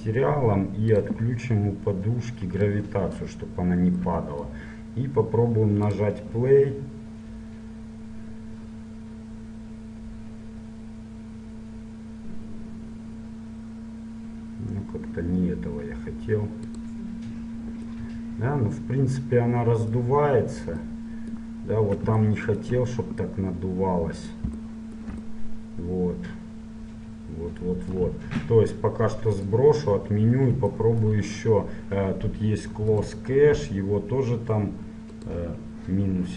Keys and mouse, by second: 4.5-5.9 middle drag, 6.1-8.1 drag, 17.1 click, 18.1-19.9 middle drag, 20.3-23.9 middle drag, 29.5-31.4 drag, 33.1-34.9 drag, 35.2-36.3 drag.